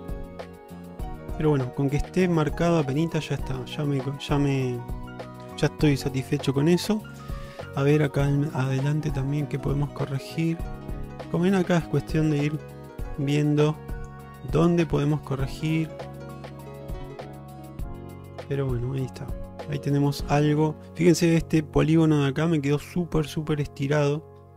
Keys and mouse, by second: 0.3-1.3 middle drag, 1.9 middle click, 2.6 shift+middle drag, 7.6 Tab, 8.8 click, 9.7 shift+middle click, 12.0 click, 13.0 click, 13.6 click, 15.2 click, 16.0 shift+middle click, 16.4 click, 17.0 click, 18.3 shift+middle click, 19.1 shift+middle click, 19.5 middle click, 20.4 shift+middle click, 20.9 middle click, 21.9 middle click.